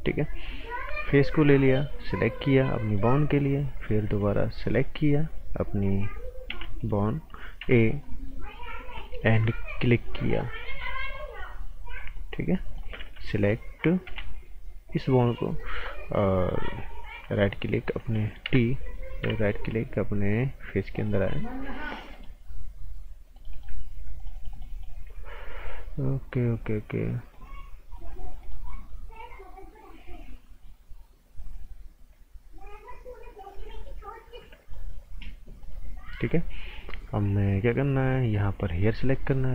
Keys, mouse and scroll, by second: 2.9 click, 3.2 right click, 3.5 scroll up 1, 3.7 right click, 4.6 click, 6.4 b, 6.8 click, 7.6 a, 8.0 right click, 8.8 scroll down 1, 9.0 right click, 9.3 scroll up 1, 9.5 right click, 10.6 click, 12.2 scroll down 1, 12.4 right click, 13.1-14.0 typing, 15.4 right click, 16.1 scroll up 1, 16.3 right click, 17.2 shift+right click, 18.4 t, 19.4 shift+right click, 21.0 click, 22.1 shift+right click, 24.1 click, 27.3 click, 33.5 click, 38.7 click, 39.1 right click.